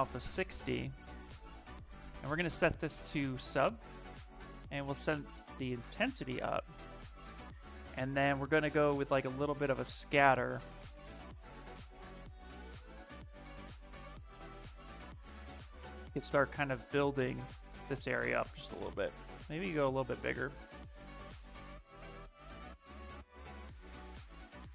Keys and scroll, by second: 1.9 space, 3.3 s, 3.9 space, 6.6 s, 10.7 space, 15.2 ctrl+z, 15.6 s, 17.1 ctrl+z, 18.0 s, 19.7 ctrl+z, 20.3 space, 22.7 ctrl+z, 23.1 s.